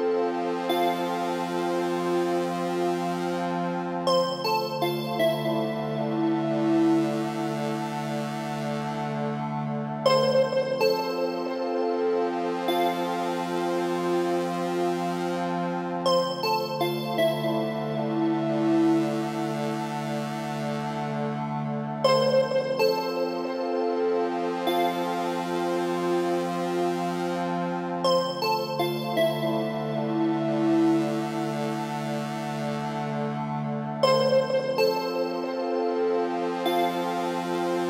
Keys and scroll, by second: 11.8 Left.